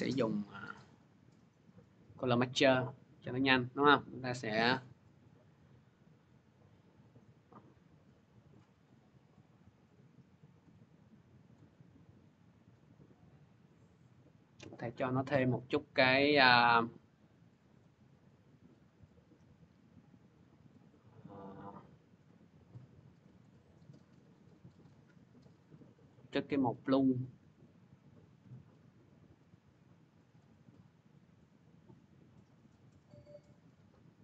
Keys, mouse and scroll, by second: 2.1 click, 3.4 click, 4.2 click, 4.9 scroll, 8.4 click, 9.7 click, 10.2 click, 11.4 click, 11.7 scroll, 13.0 scroll, 13.9 click, 14.7 click, 16.2 click, 17.6 click, 17.6-18.1 scroll, 23.2 click, 24.5 click, 25.9 click, 30.2 click, 32.9 click, 33.4 middle click, 33.7 middle click.